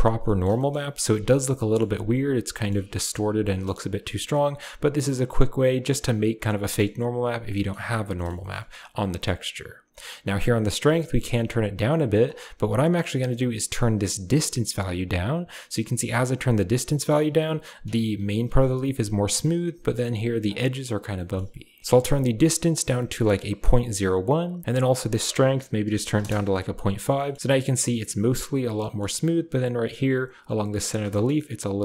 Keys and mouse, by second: 0.1 click, 0.5 shift+click, 1.4 click, 2.4 shift+click, 3.4 click, 4.9 click, 5.6 click, 6.3 middle click, 7.5 middle click, 8.3 shift+click, 10.5-12.1 drag, 13.2-16.6 shift+drag, 16.9 middle drag, 21.1 middle click, 24.7-26.1 drag, 27.2 middle click, 28.7 shift+middle drag, 30.8 a, 31.1 shift+middle click, 31.2-31.8 middle drag.